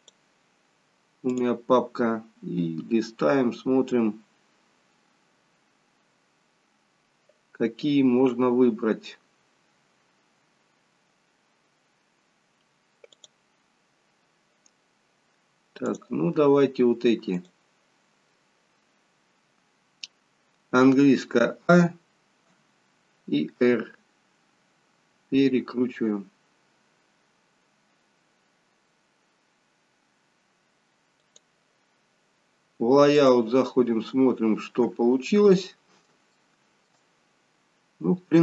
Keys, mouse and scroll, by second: 33.5 click, 34.2-35.2 scroll up 2, 35.2-35.8 scroll down 2, 35.8 shift+middle click, 37.2-37.9 scroll up 2, 38.0-38.4 scroll down 1.